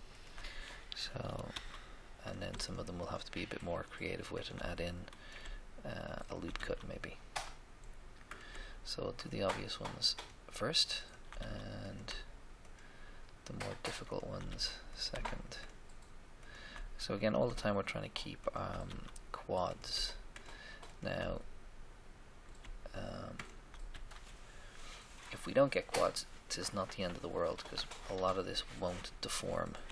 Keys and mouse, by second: 1.4 f, 1.6 f, 6.5 f, 6.8 f, 11.4 f, 11.4 f, 14.4 f, 14.5 f, 17.5 right click, 18.4 shift+right click, 18.8 f, 19.0 f, 21.4-22.6 middle drag, 23.5 shift+right click, 23.9 f, 24.1 f, 28.1-29.6 middle drag, 29.6-29.9 right drag.